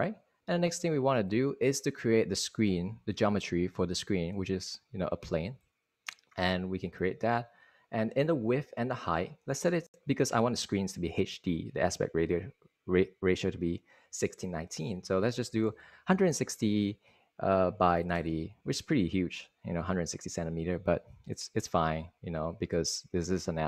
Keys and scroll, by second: 15.1 super+a, 15.8-16.8 typing, 17.0 Tab, 18.1-18.9 typing.